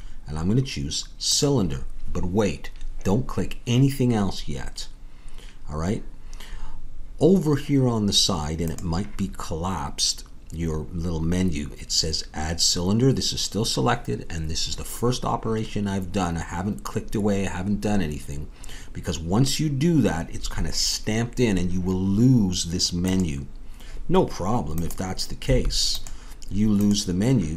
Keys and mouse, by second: 25.4 a.